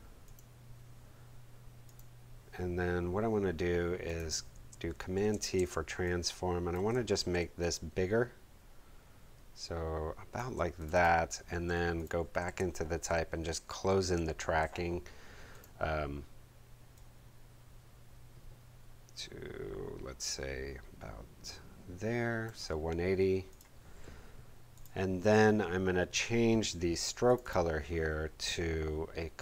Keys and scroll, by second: 4.9 shift+super+t, 5.5 shift+super+space, 6.5 shift+space, 11.8 shift+t, 12.3 shift+super+t, 12.4 shift+super+a, 13.0 alt+shift+super+a, 13.4 alt+shift+super+Left.